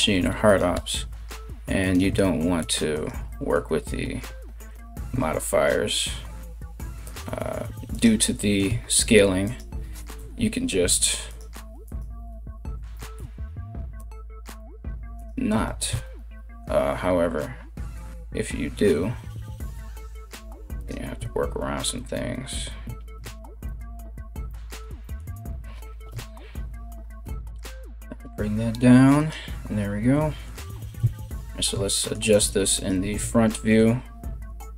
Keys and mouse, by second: 0.3 g, 2.5 alt+right click, 2.7-34.7 alt+middle drag, 3.9 KP_1, 4.3 g, 7.5 alt+right click, 8.3 s, 9.7 KP_1, 10.9 alt+right click, 11.4 alt+right click, 12.5 e, 14.0 r, 15.2 r, 19.0 g, 20.7 s, 25.7 KP_1, 26.8 e, 30.6 KP_3, 32.3 right click.